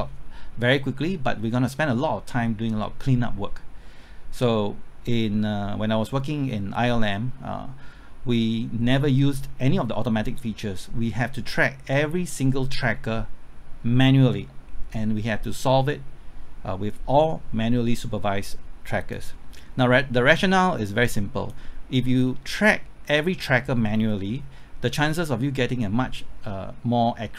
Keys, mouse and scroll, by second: 21.9 scroll down 1, 22.3-27.3 middle drag.